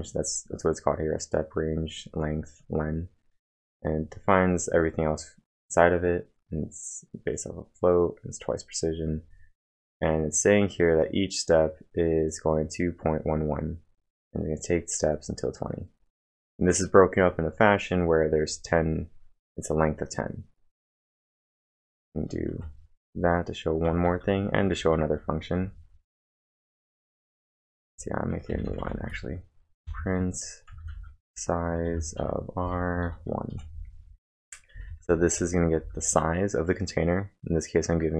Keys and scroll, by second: 22.3 Return, 22.5 ctrl+1, 23.0-26.2 typing, 29.3-29.8 typing, 31.1-36.6 typing.